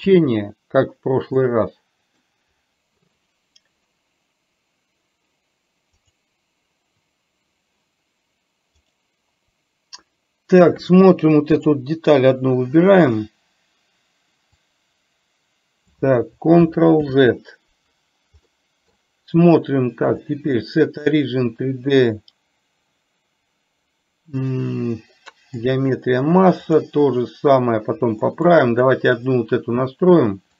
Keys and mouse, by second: 1.5-2.2 middle drag, 2.7-9.1 right drag, 11.6 click, 14.7-16.0 drag, 18.6 middle click, 20.2-26.0 drag, 26.8 click, 28.3 middle click, 29.0 click.